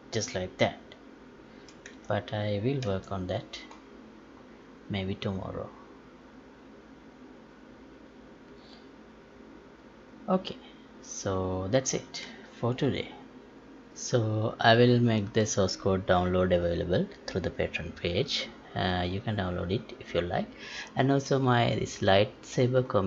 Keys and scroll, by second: 12.2 Escape.